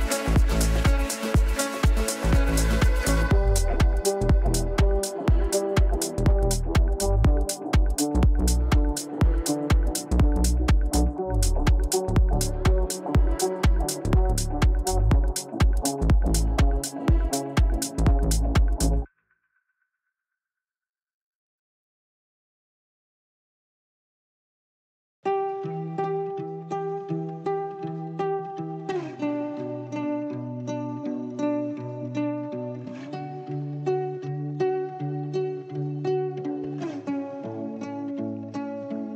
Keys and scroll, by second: 3.4 g, 17.5 g, 34.4 shift+F2, 34.9 F3.